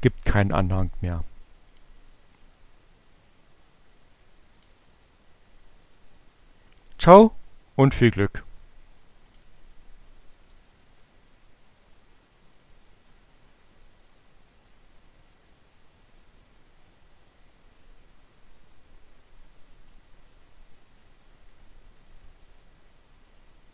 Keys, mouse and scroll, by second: 4.4 click, 8.7 click, 9.3 Up, 11.1 Return.